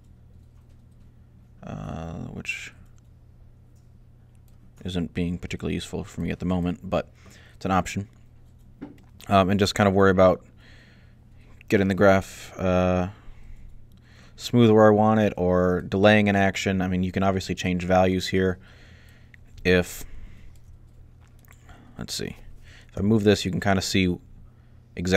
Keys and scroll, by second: 22.8 g.